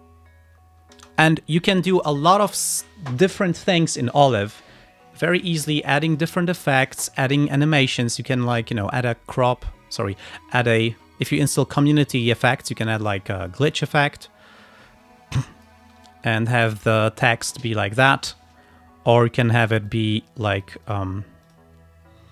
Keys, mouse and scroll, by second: 1.0 space, 5.2 click, 6.1 click, 13.7 click, 15.5 click, 16.0 space, 18.2 space, 19.2 click, 19.9 click, 20.7 click, 21.5 click.